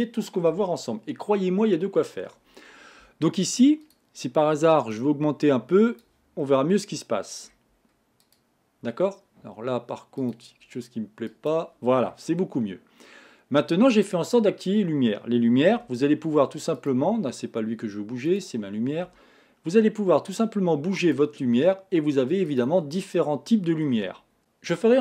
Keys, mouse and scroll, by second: 4.0 click, 6.4-7.8 middle drag, 7.8 scroll up 2, 8.2 click, 10.2-11.9 drag, 11.9 scroll down 4, 12.4-15.4 middle drag, 16.0 g, 18.3 click, 19.1 g, 22.5 click, 23.1-24.4 middle drag.